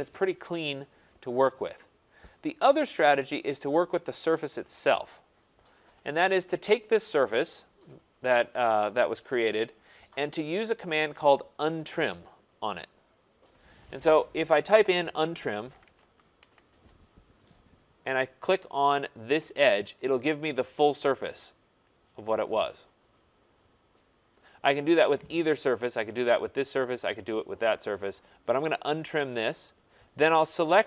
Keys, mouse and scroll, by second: 0.8 right click, 1.7 scroll down 1, 2.3-2.8 scroll down 3, 2.8-3.7 scroll, 4.2-5.4 scroll, 5.4 click, 7.6 scroll, 8.1 scroll, 10.3 scroll, 11.9 scroll, 14.9-17.2 typing, 15.2 scroll down 3, 19.2 click, 20.1 scroll, 20.9 scroll, 24.3 right click, 26.0 click, 30.4 click.